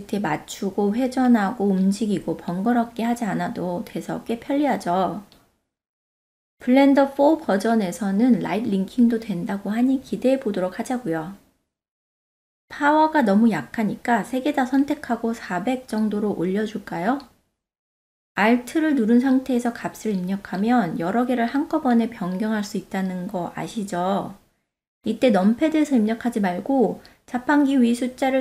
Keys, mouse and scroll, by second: 0.4 click, 0.7-3.1 drag, 6.2 ctrl+z, 6.6 click, 7.3-8.4 drag, 8.5 ctrl+z, 9.3 click, 9.9 click, 11.1 ctrl+z, 12.0 shift+click, 12.6 shift+click, 18.8-22.8 alt+drag, 22.1 alt+0, 28.3 click.